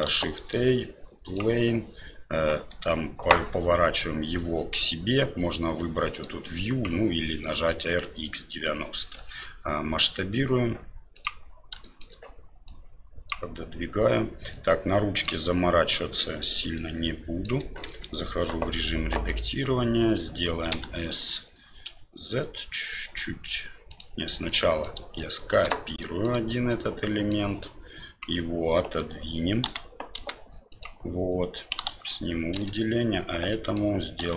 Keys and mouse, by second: 0.0 shift+a, 4.7-6.2 drag, 9.2 s, 11.9 middle click, 12.7 click, 14.6 click, 16.7 click, 17.8 Tab, 20.7 s, 24.5 middle click, 25.5 shift+d, 26.8 middle click, 29.6 g, 31.8 alt+a, 33.5 middle click, 34.2 l, 34.2 s.